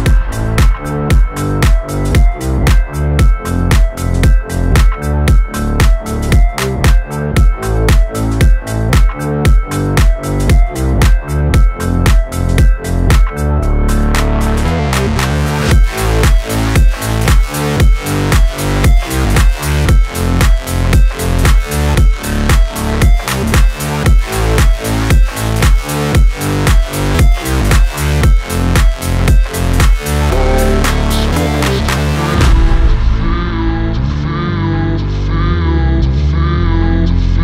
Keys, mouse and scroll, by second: 0.7-2.8 drag, 5.1 click, 6.2 click, 7.7 Return, 8.5 click, 9.1 F9, 10.7-17.2 drag, 17.2 space, 19.4 click, 19.8 space, 20.0 scroll down 1, 21.5-22.9 drag, 24.6 Return, 24.9 space, 26.7 click, 26.9 space, 28.7 space, 30.0-33.2 drag, 33.6-36.0 drag, 36.0 shift+r, 36.8-37.4 drag.